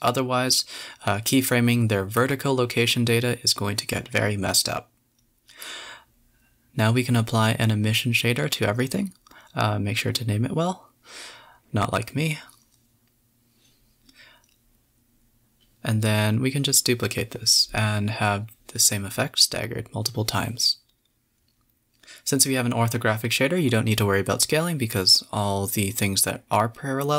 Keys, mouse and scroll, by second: 0.4 shift+click, 0.8 shift+click, 1.1 scroll down 1, 1.4 scroll up 1, 1.5-3.1 typing, 1.7 middle click, 2.8 scroll up 3, 3.3 click, 4.0 click, 4.5 drag, 5.2-6.2 drag, 6.7-9.5 drag, 9.5-10.3 middle drag, 10.3 z, 11.2 shift+click, 11.5-11.9 scroll down 1, 11.9 shift+click, 12.5-13.0 middle drag, 13.0 shift+d, 13.8 click, 15.1 click, 15.7-17.1 drag, 17.8 click, 19.4 click, 20.1 KP_0, 21.2 space, 21.9-22.3 middle drag, 22.3 scroll down 2, 23.3 space, 23.7 click, 24.4 space, 25.0 space, 25.7-26.5 drag, 26.7 click.